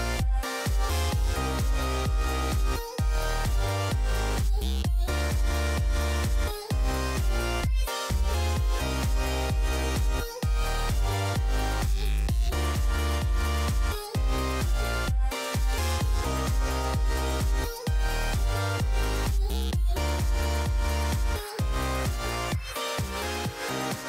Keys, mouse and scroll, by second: 2.7 click, 3.3-3.9 middle drag, 4.4 KP_5, 15.4 KP_1, 16.0 KP_5, 16.7 z, 19.4-22.7 drag, 22.8 KP_3.